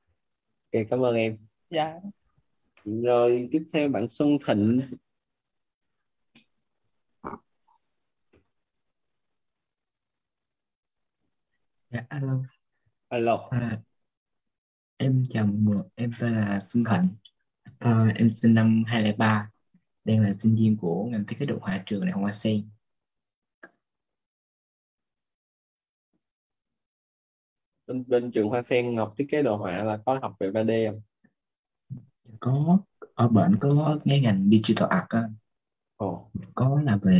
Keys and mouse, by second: 2.6 click, 18.9 click, 20.6-27.6 typing, 31.2-36.2 typing.